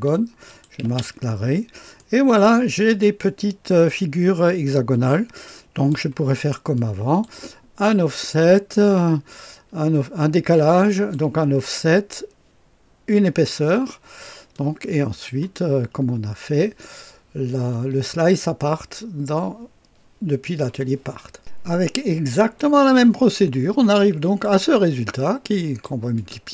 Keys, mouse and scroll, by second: 0.4 click, 0.9 space, 1.5-2.1 scroll up 1, 1.9 right click, 2.4 click, 3.1 click, 3.1 right click, 4.1 click, 4.3 right click, 4.8-5.9 drag, 6.7 click, 8.6-11.1 drag, 14.4 click, 21.3 click, 22.5-25.8 drag, 26.1 click.